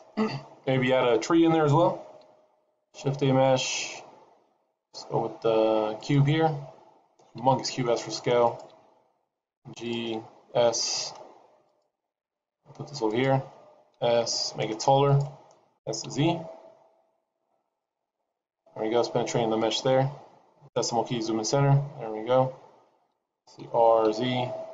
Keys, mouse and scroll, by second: 2.5 shift+a, 4.6 shift+a, 7.3 s, 9.7 g, 10.1 s, 12.1 g, 13.9 s, 15.7 s, 19.7 scroll up 2, 20.7 KP_Decimal, 22.1-22.5 scroll down 3, 23.5 r.